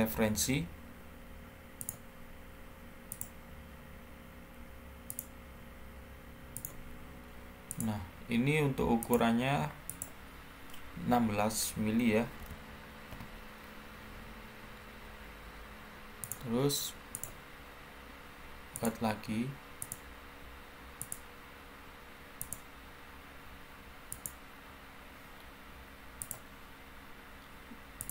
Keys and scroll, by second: 0.0 Escape, 11.8-12.3 typing, 13.0 Return, 20.8-21.5 typing.